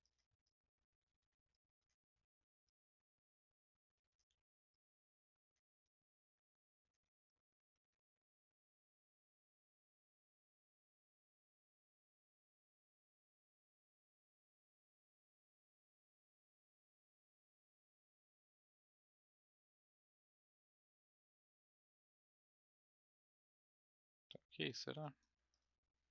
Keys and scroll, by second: 4.2 w, 22.4 r.